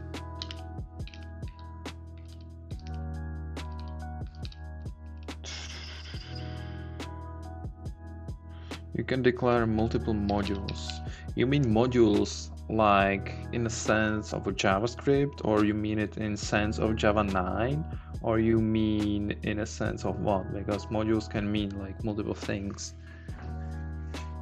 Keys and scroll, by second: 0.3 Right, 0.4 Down, 1.0 Right, 1.1 Down, 1.4 Right, 3.8 Down, 5.0 Up, 8.7 Up, 10.2 Down.